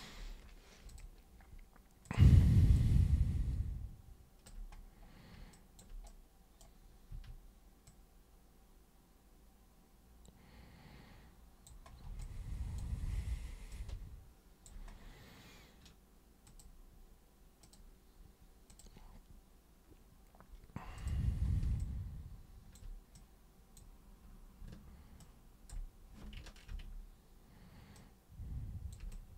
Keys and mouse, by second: 0.8 super+click, 2.0 super+click, 2.7-4.5 alt+super+drag, 5.5 alt+super+click, 6.1 alt+super+right click, 7.1 super+e, 7.8 super+click, 12.2-12.8 alt+super+drag, 13.7 alt+super+click, 16.5 super+click, 17.6 super+click, 18.7 super+click, 20.9 super+click, 21.8 alt+super+click, 23.1-23.7 super+drag, 25.2-25.7 ctrl+super+drag, 26.7 ctrl+super+e, 27.9-28.9 super+drag, 29.1 alt+super+click.